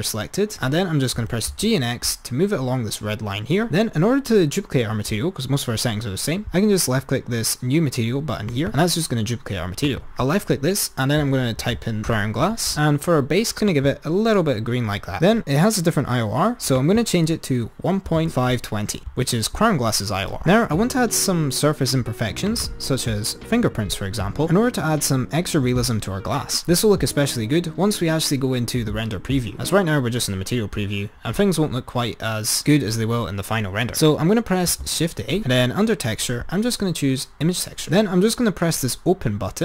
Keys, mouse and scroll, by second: 8.6-12.0 drag, 13.6 click, 16.9-18.6 drag, 23.5 click, 34.7 shift+a.